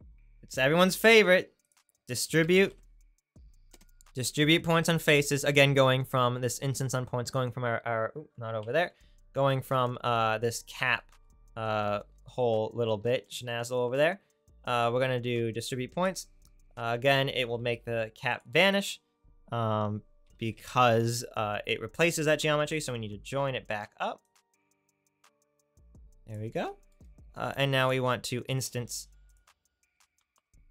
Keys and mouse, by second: 1.0 shift+a, 1.1-8.4 right drag, 8.6 ctrl+z, 8.7-10.8 right drag, 11.2 click, 14.1-17.4 drag, 17.5 shift+a, 20.6-22.7 drag, 22.7-24.4 right drag, 24.4-26.2 drag, 28.5 shift+a.